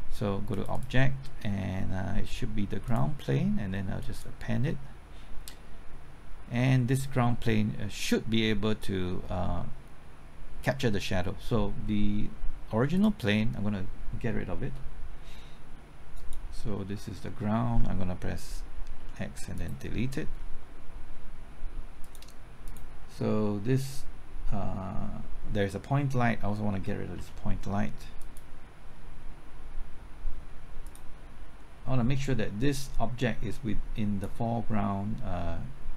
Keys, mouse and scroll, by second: 0.5-5.0 drag, 18.9 x, 19.5 click, 27.1 x, 28.2-35.0 drag.